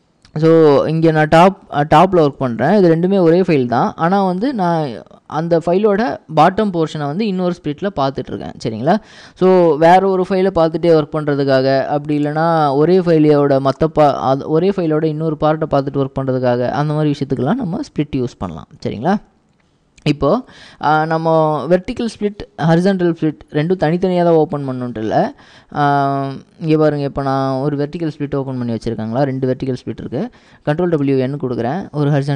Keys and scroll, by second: 0.0-1.7 typing, 3.1 ctrl+w, 3.5 l, 4.2 ctrl+w, 4.5 h, 7.0 typing, 24.9-25.6 typing, 31.0 ctrl+w, 31.1 ctrl+n.